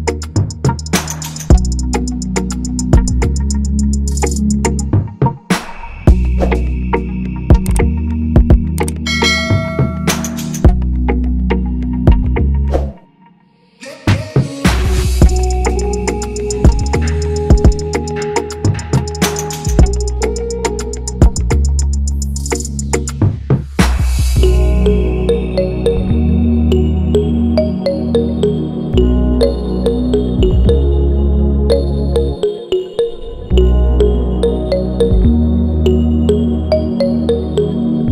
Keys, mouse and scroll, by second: 6.0 alt+click, 18.4 double click, 19.3 ctrl+=, 19.8 ctrl+=, 20.6 ctrl+-, 20.9 ctrl+=, 21.1 ctrl+=, 21.3 ctrl+=, 21.9 ctrl+-, 22.0 ctrl+-, 22.1 ctrl+-, 22.4 ctrl+=, 22.5 ctrl+=, 22.8 ctrl+=, 24.9 ctrl+-, 25.1 ctrl+-, 25.6 ctrl+=, 25.7 ctrl+=, 26.5 ctrl+=, 27.3 ctrl+-, 27.6 ctrl+-, 27.9 ctrl+-, 28.3 ctrl+-, 28.5 ctrl+-, 28.8 ctrl+-, 29.0 ctrl+-, 29.2 ctrl+=, 29.3 ctrl+=, 29.4 ctrl+=, 29.5 ctrl+=, 37.3 Return.